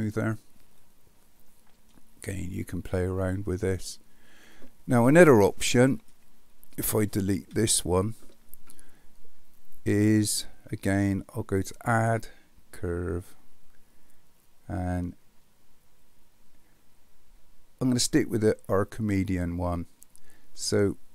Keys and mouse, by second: 0.9-1.9 middle drag, 7.5 Delete, 11.6-19.5 drag.